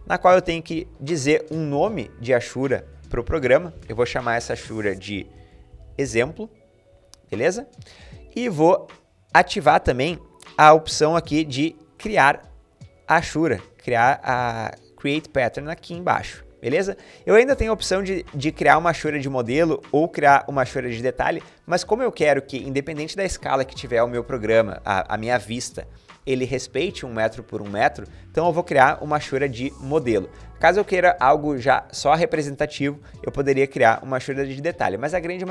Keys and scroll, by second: 4.8-6.5 typing.